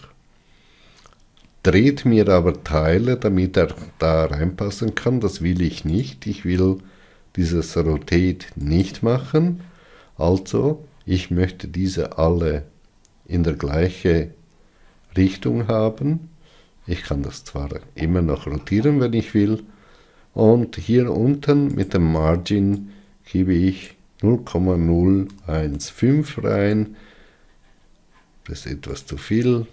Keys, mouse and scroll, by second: 9.3-27.3 drag.